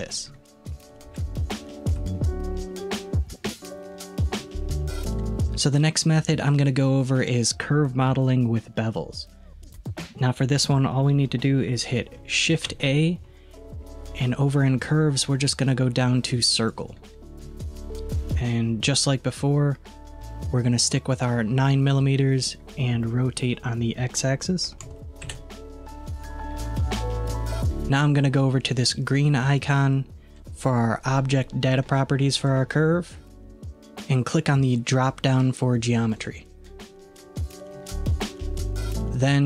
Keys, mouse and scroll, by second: 0.3 middle click, 1.1 alt+z, 1.7-5.2 shift+middle drag, 9.0-12.1 middle drag, 12.6 shift+a, 23.6-26.6 drag, 26.7-28.4 scroll up 1, 32.4 click, 36.2-37.1 drag, 37.1-39.4 scroll down 5.